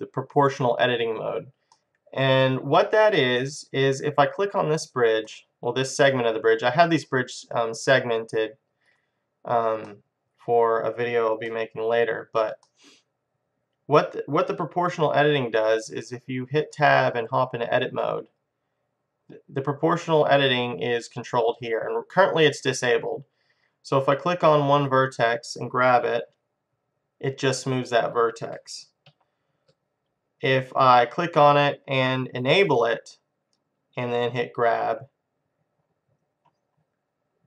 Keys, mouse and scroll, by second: 4.6-6.2 drag, 5.3-6.9 middle drag, 7.8-10.7 drag, 9.9-14.5 middle drag, 17.0 Tab, 24.8-26.7 drag, 26.3 g, 28.3-30.1 drag, 29.2 ctrl+z, 30.8-32.6 drag, 34.4 g.